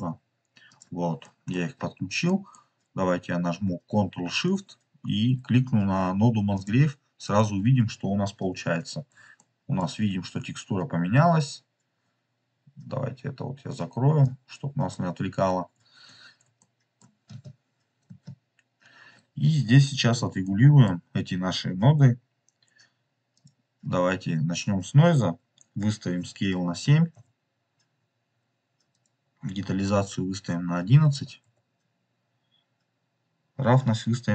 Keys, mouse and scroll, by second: 0.6 click, 1.1 middle click, 1.7-2.1 scroll down 2, 2.2 middle click, 6.7 ctrl+shift+click, 9.3 shift+middle click, 10.1 scroll down 2, 14.2 click, 15.3 scroll up 2, 16.2 scroll down 3, 16.5 shift+middle click, 17.4 space, 18.0 space, 20.3 middle click, 21.9 middle click, 22.0-23.2 scroll up 3, 23.3-27.9 drag, 28.9-34.0 drag, 31.0 KP_1.